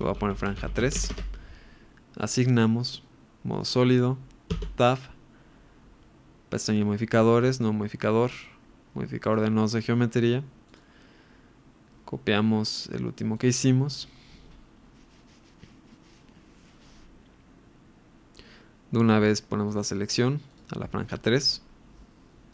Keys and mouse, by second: 2.2 click, 3.6 click, 4.6 Tab, 7.5-7.9 drag, 8.4-9.4 drag, 10.7-16.4 drag, 19.1-21.0 drag.